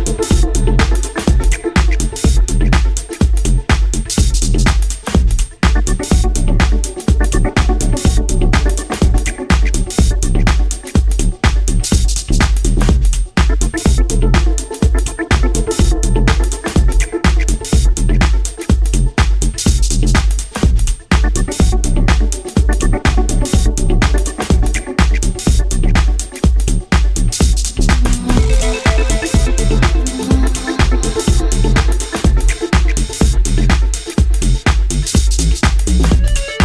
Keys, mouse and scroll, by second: 0.3 s, 1.5 click, 2.0-2.4 scroll down 3, 2.1 scroll up 1, 2.4 Tab, 3.0 middle click, 5.4 click, 9.1 click, 14.1 Tab, 15.6 ctrl+r, 18.2 click, 19.2 ctrl+r, 22.8 click, 24.3-24.9 scroll up 4, 25.0 Tab, 25.4-25.9 scroll down 4, 25.9 middle click, 29.9 click.